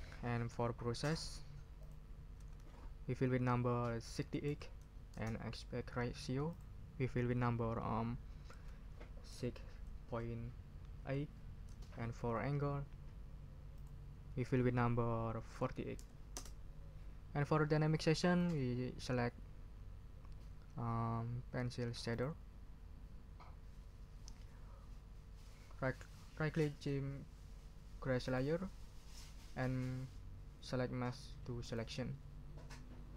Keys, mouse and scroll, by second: 1.8 ctrl+click, 2.3 ctrl+a, 4.2 6, 4.5 8, 5.1 Return, 6.5 scroll up 3, 8.5 ctrl+a, 9.3 6, 10.0 ,, 11.0 8, 11.7 Return, 13.7 scroll up 2, 14.4 ctrl+a, 15.6 4, 16.0 8, 16.3 Return, 18.3 click, 19.9 scroll up 1, 22.1 click, 28.2 right click, 31.6 click.